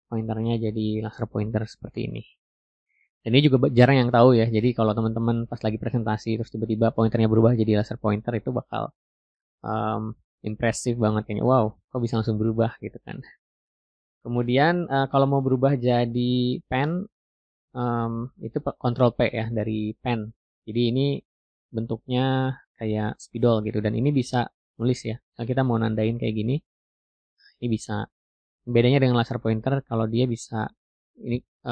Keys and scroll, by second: 20.3 ctrl+p.